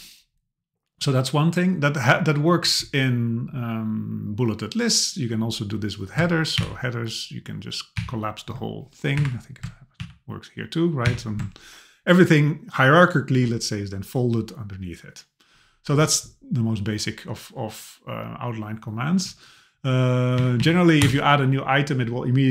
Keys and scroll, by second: 6.6 ctrl+alt+[, 8.0 ctrl+alt+], 9.2 Up, 10.0 ctrl+alt+[, 11.1 ctrl+alt+], 20.4 Down, 21.0 Return.